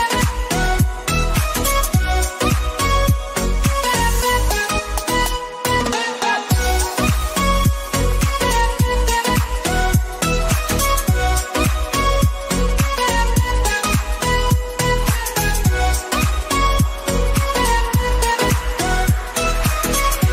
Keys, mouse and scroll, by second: 1.8-5.8 drag, 6.2-13.4 drag, 13.4 click, 14.9 Right, 16.0 Page_Down, 16.8-17.2 scroll up 1, 18.5 Up, 19.5 Right.